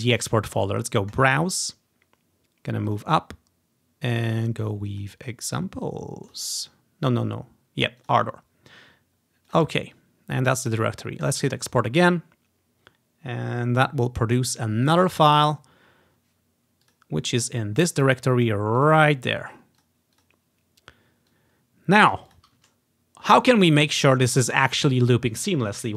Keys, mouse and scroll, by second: 1.3 click, 3.0 click, 5.0 click, 6.4 click, 8.1 click, 9.6 click, 11.4 click, 11.6-12.8 drag, 17.0 click, 18.9 click, 19.9 click, 20.3 click, 21.4 click, 22.4 click, 23.1 click, 24.4-25.7 drag.